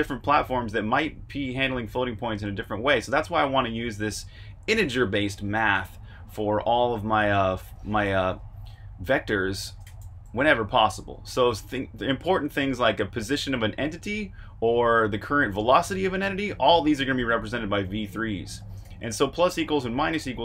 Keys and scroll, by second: 8.3 Escape, 8.6-11.4 typing, 10.9 Escape, 16.1 shift+v, 17.6-19.3 typing.